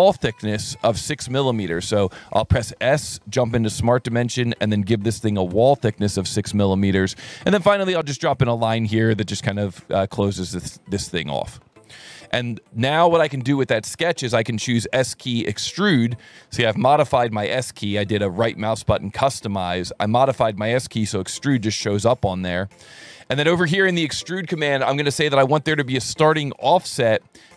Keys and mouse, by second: 2.0 click, 3.2 click, 4.1 click, 4.6 click, 5.3 KP_6, 5.5 KP_Enter, 6.7 s, 7.4 click, 9.2 click, 10.5 click, 11.1 Escape, 14.8 s, 15.4 click, 17.7 s, 18.3 right click, 23.9 alt+1, 24.9 click, 25.9 ctrl+shift+click.